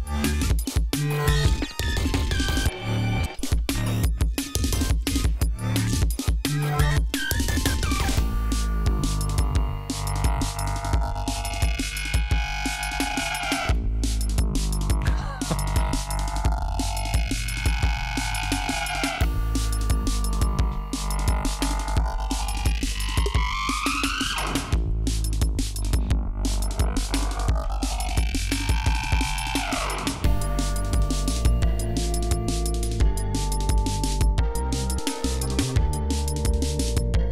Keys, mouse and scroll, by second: 6.4 ctrl+scroll down 2, 6.7 ctrl+scroll up 2, 8.9-9.3 scroll down 2, 9.7-10.0 scroll down 2, 10.4 scroll down 2, 16.2 ctrl+scroll down 2, 16.7 ctrl+scroll up 2, 17.8 scroll up 2, 18.2-18.5 scroll down 2, 18.6-19.5 scroll up 6, 20.1 ctrl+scroll down 2, 20.3 ctrl+scroll up 2, 27.0 ctrl+scroll down 2, 28.2 ctrl+scroll down 2, 28.5 ctrl+scroll up 2, 29.0 ctrl+scroll down 2, 29.4 ctrl+scroll up 2, 30.9-32.0 scroll up 4, 32.3 scroll up 2, 32.9 g, 33.7 ctrl+scroll up 2, 34.2-34.5 ctrl+scroll down 3, 35.5 d, 35.9 ctrl+scroll down 2, 36.5 ctrl+scroll up 2.